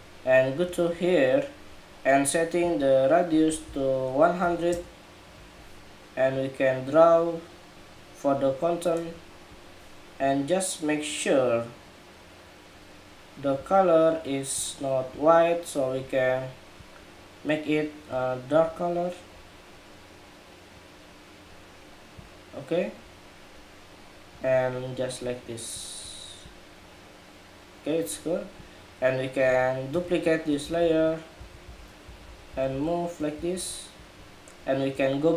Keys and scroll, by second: 29.6 super+j, 30.9 super+j.